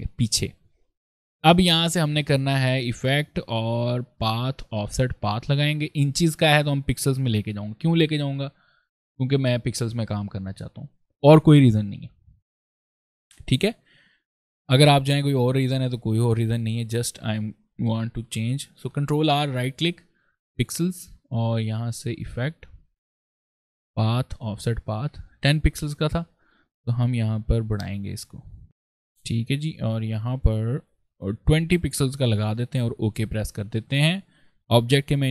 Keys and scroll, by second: 18.6 ctrl+r.